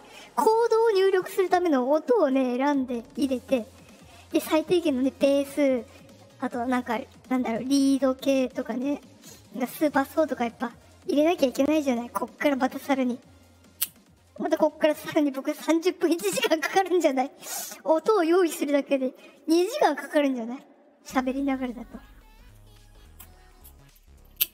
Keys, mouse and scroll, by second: 17.4 click.